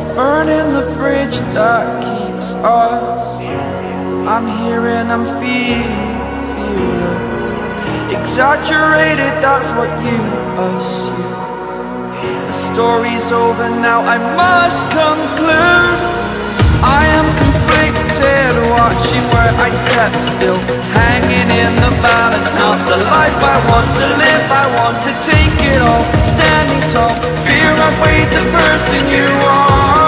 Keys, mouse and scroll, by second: 0.6 click, 1.9 a, 4.3 click, 11.4 z, 12.0 right click, 12.7 click, 13.5 ctrl+shift+a, 15.9 click, 22.0 scroll up 1, 22.5 scroll up 1, 23.4-23.9 scroll down 3, 25.0 click.